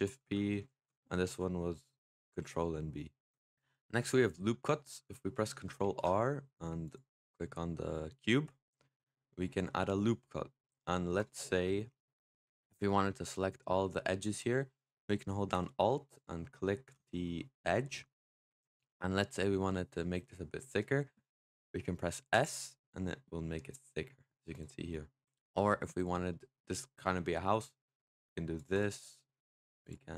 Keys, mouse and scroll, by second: 0.4 ctrl+z, 2.1 ctrl+b, 3.5-5.7 scroll down 1, 5.7 ctrl+r, 8.6-11.0 middle drag, 11.0 click, 11.4 middle click, 12.3-13.9 scroll up 2, 13.9-16.0 middle drag, 16.0 alt+click, 17.1-20.2 middle drag, 20.2-20.9 scroll down 1, 22.2 s, 24.6-25.8 middle drag, 25.8 click, 26.2 middle click, 26.4-26.9 scroll down 2, 26.9 middle click, 27.7 click, 28.6 click, 28.9 middle click, 29.7 click.